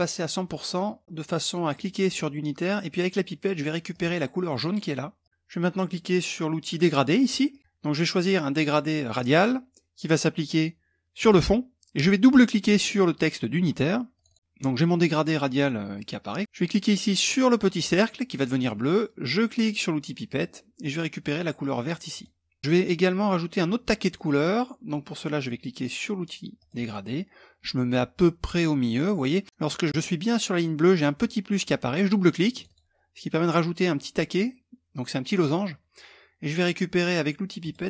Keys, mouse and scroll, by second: 0.3-1.9 drag, 3.5 click, 4.8 click, 7.1 click, 8.7 click, 10.7 click, 13.7 click, 17.3 click, 19.8 click, 21.7 click, 26.1 click, 32.1 click, 37.2 click.